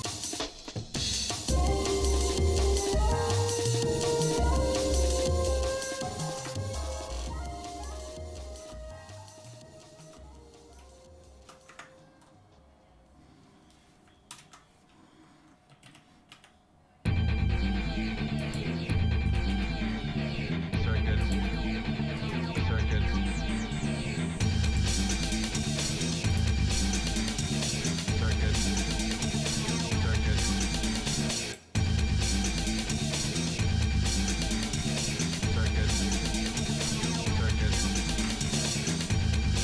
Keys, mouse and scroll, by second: 0.7 shift+middle click, 1.5 shift+middle click, 4.8 shift+middle click, 6.3 Tab, 7.3 scroll down 2, 7.9 shift+middle click, 9.5 shift+middle click, 10.8 shift+middle click, 11.7 Tab, 12.2-12.6 scroll up 2, 14.3 ctrl+KP_Add, 15.8 g, 19.4 s, 21.5 shift+middle click, 22.4 Tab, 23.2-23.6 scroll down 2, 23.6-24.1 scroll up 2, 24.7-26.6 right drag, 27.0 shift+middle click, 27.5 shift+middle click, 28.2 middle click, 28.8 shift+middle click, 29.7 scroll down 1, 30.0 scroll down 1, 30.7 shift+middle click, 31.5 click, 33.3 ctrl+s, 34.8 r.